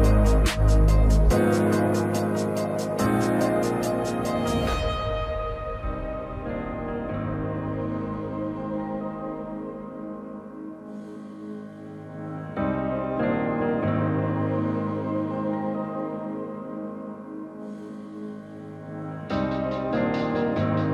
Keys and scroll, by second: 0.3 a, 2.1 s, 9.7 a, 14.1-14.9 typing.